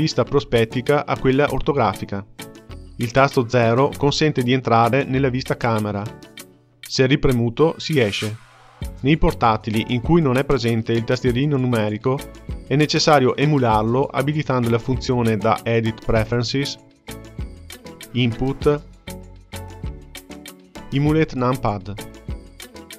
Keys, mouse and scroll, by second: 1.0 KP_5, 3.4 KP_0, 7.9 KP_0, 14.1-17.2 drag.